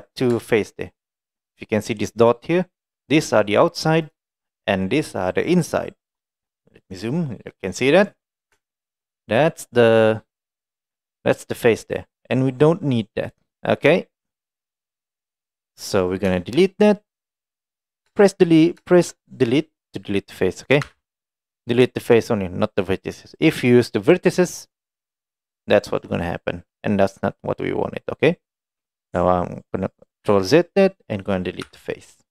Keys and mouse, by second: 0.6 shift+middle click, 1.2 middle click, 3.1 click, 4.1 click, 5.6 click, 6.9-8.1 middle drag, 8.7 shift+middle click, 9.2-16.1 middle drag, 16.4 shift+middle click, 17.2 middle click, 17.8 middle click, 19.0 shift+middle click, 20.9 Delete, 25.4 middle click, 26.2-29.0 middle drag, 30.3 ctrl+z, 31.7 Delete.